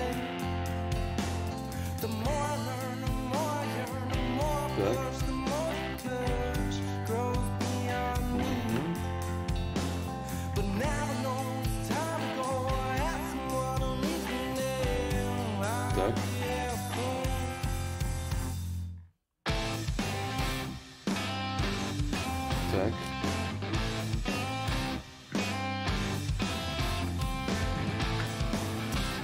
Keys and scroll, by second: 2.8 s, 4.9 s, 28.4 s.